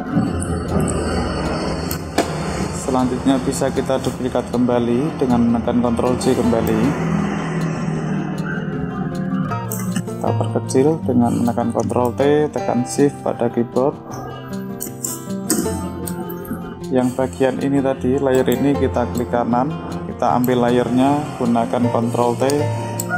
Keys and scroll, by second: 6.3 ctrl+j, 11.5 ctrl+t, 21.6 ctrl+t.